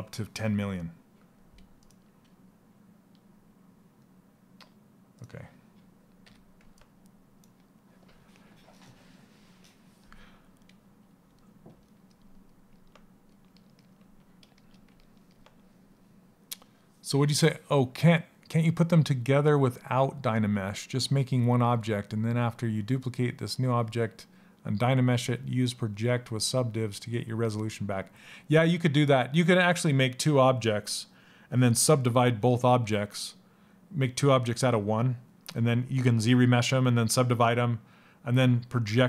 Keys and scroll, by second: 5.8 f.